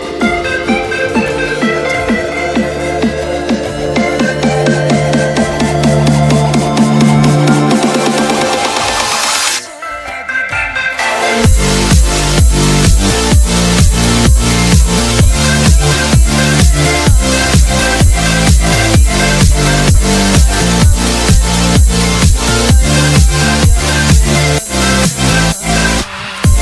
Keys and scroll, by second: 1.8 e, 2.3 shift+F2, 2.7 Escape, 3.5 F3, 3.9 Escape, 8.5 ctrl+Page_Down, 9.7 Escape, 10.9 F2, 18.1 ctrl+Page_Down, 20.1 ctrl+Page_Down, 21.4 F3, 23.7 Escape.